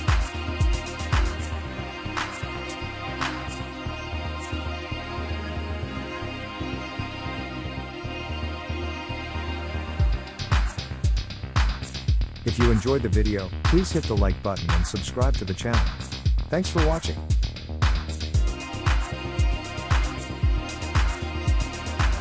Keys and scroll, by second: 6.2 typing.